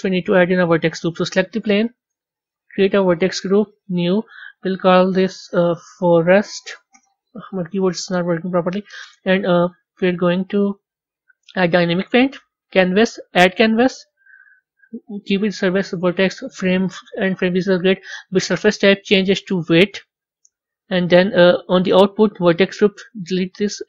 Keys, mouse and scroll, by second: 1.3 click, 2.3 click, 3.4 click, 4.4-7.4 drag, 9.7 click, 10.6 click, 11.8 click, 13.2 click, 13.8-14.3 scroll down 4, 15.0-16.5 scroll down 1, 17.5-18.7 scroll down 1, 18.7-20.5 drag, 20.5-21.6 scroll down 8, 22.9 click, 23.7-23.8 drag.